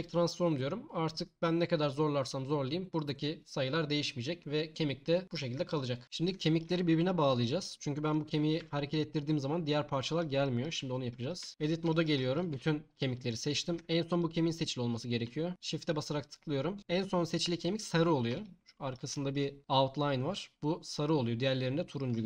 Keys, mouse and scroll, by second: 8.6 g, 10.1-11.1 drag, 11.5 Tab, 12.5 a.